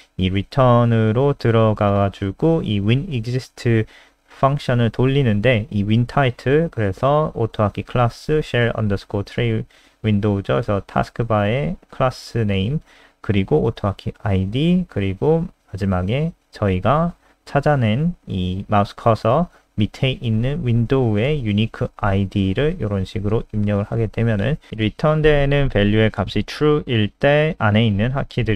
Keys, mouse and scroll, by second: 7.5 click, 13.2 click, 15.8 click, 22.1 click, 23.6-24.5 scroll up 1, 24.7 click, 25.4 Down, 25.7 Home, 25.9 ctrl+Right, 26.6 shift+End, 26.8 ctrl+c, 27.0 Up, 27.2 End, 27.4 Return, 28.1-28.5 typing.